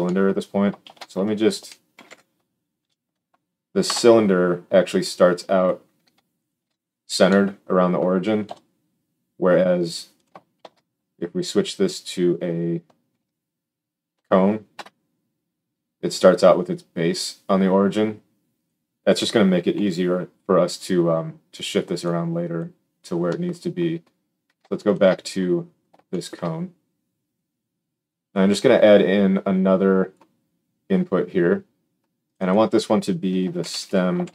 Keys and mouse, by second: 0.8 shift+a, 5.6 click, 6.3 alt+shift+click, 8.4 KP_1, 10.5 shift+s, 18.5 click, 19.7 x, 21.9-23.7 drag, 25.0-28.2 drag.